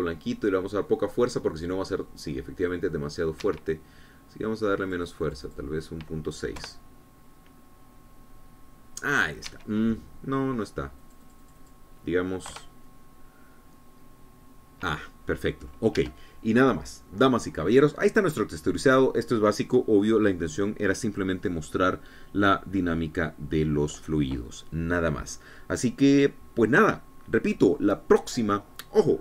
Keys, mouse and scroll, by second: 1.0 F12, 4.6 Escape, 6.1 click, 7.8 F12, 10.7 Escape, 12.2 click, 13.8 F12, 17.2 Escape.